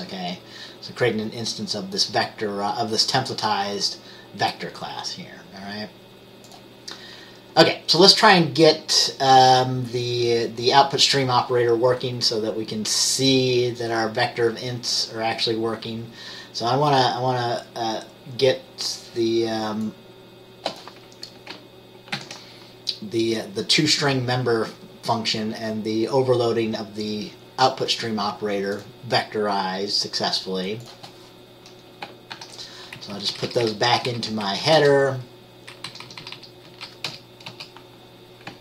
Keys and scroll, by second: 22.3 ctrl+c, 32.4 ctrl+v, 33.1 Up, 33.3 Up, 33.4 Up, 33.5 Up, 34.1 Down, 34.2 Left, 36.0 Down, 36.2 Down, 36.3 Down, 36.5 Down, 36.8 Down, 37.2 BackSpace, 37.6 BackSpace.